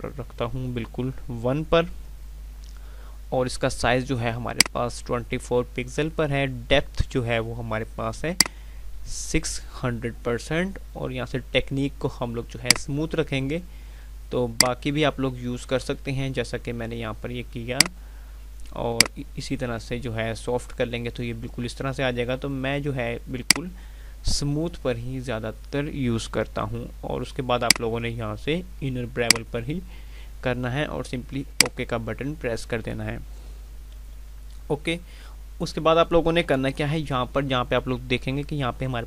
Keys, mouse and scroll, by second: 34.2 F5.